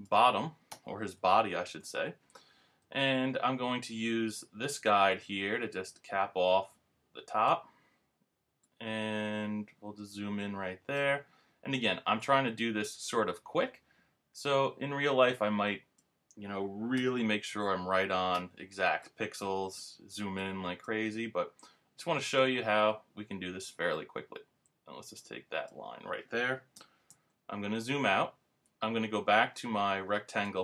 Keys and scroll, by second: 1.2 super+-, 17.5 super+=, 27.1 super+-.